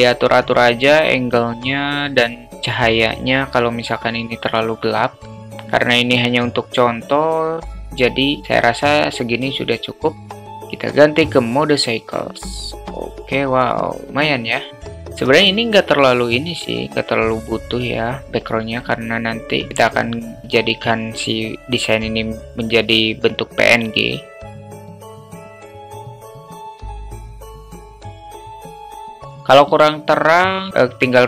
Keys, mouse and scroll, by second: 1.0 q, 3.5 click, 5.2-6.0 drag, 7.0-8.0 drag, 10.6-11.4 drag, 15.8 click, 24.7 drag, 25.4 click, 25.7 drag, 25.9-26.2 drag, 26.6 drag, 27.1 click, 27.3 click, 28.6-29.1 drag.